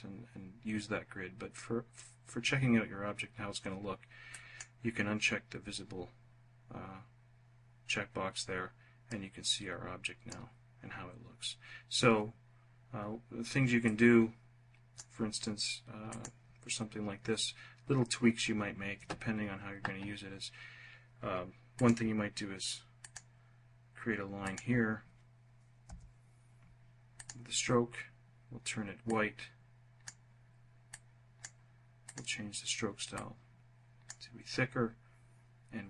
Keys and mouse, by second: 3.8 click, 8.5-9.8 drag, 13.3 click, 14.0 click, 15.5 click, 21.2 click, 22.5 click, 25.3 Return.